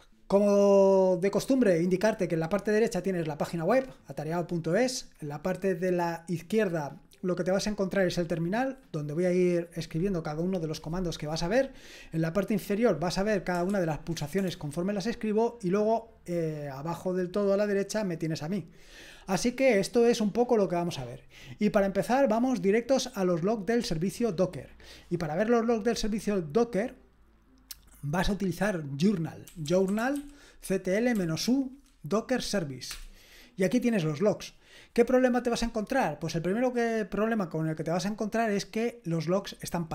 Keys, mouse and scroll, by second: 13.4-14.2 typing, 22.3 scroll down 1, 23.1-24.7 scroll down 1, 24.7 click, 29.4-30.6 typing, 31.1 Right.